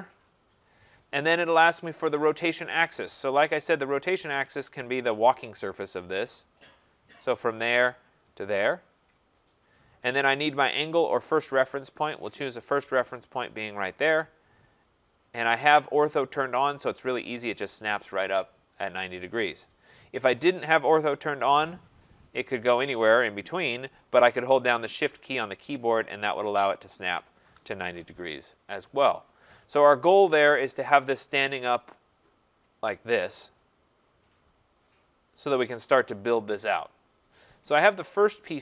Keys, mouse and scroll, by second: 7.1 click, 8.3 click, 11.8 right click, 14.2 click, 16.6 right click, 21.5 click, 27.3 shift+click, 35.5-38.6 right drag.